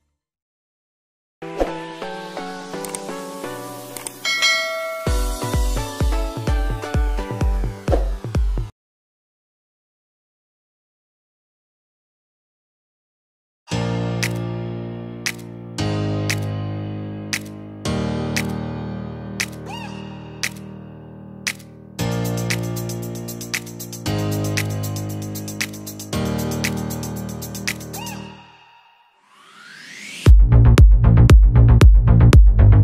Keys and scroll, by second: 9.0 Return, 9.4 v, 9.5 Up, 10.2 Right, 10.7 Up, 11.5 Left, 12.0 Up, 18.1 ctrl+z, 19.7 ctrl+z, 24.5 ctrl+t, 28.3 Return, 31.6 Return, 32.3 Up.